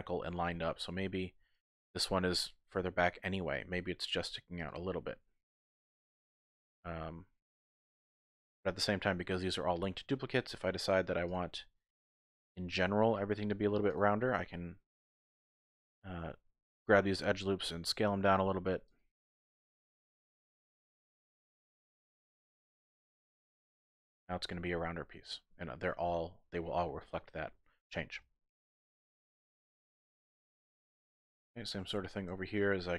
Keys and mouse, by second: 1.6 click, 1.9 g, 4.6 click, 4.6 typing, 4.8 middle click, 6.6-8.2 typing, 6.7 click, 7.7 click, 7.9 middle click, 8.0 click, 8.6 Tab, 11.2 alt+click, 11.4-11.9 typing, 11.5 click, 11.9 middle click, 14.2 middle click, 14.8 typing, 16.7 g, 16.9 g, 18.1-19.5 typing, 18.2 click, 18.9 click, 19.4 middle click, 20.1 click, 21.2 alt+click, 22.4 s, 23.7 click, 23.9 Tab, 24.2 middle click, 24.9-25.9 drag, 27.8 click, 28.4 shift+click, 30.1 KP_1, 31.4 shift+click, 32.6 shift+click.